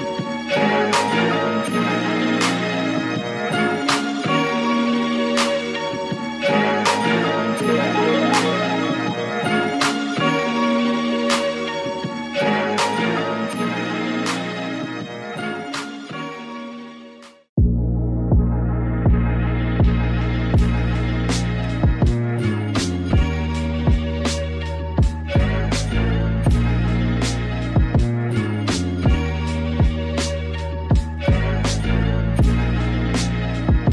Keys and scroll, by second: 4.9 alt+Down, 10.9 super+z, 11.2 super+z, 29.9 super+-, 30.5 super+=.